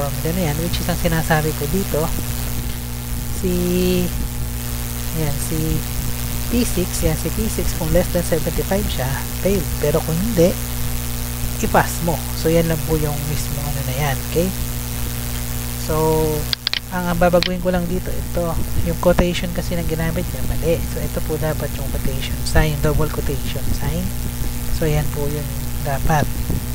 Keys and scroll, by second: 0.4 BackSpace, 1.3 Left, 5.4 Up, 5.7 Left, 17.6 Left, 18.4 BackSpace, 19.8 shift+', 20.5 BackSpace, 20.9 Right, 22.4 BackSpace, 22.9 shift+', 23.6 BackSpace, 23.9 Down, 24.2 Left, 25.6 Right, 26.1 BackSpace, 26.6 shift+'.